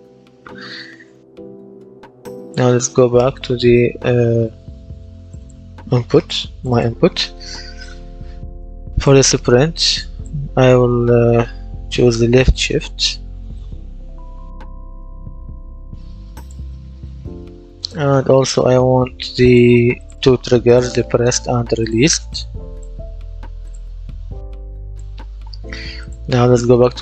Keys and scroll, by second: 11.0-15.0 typing.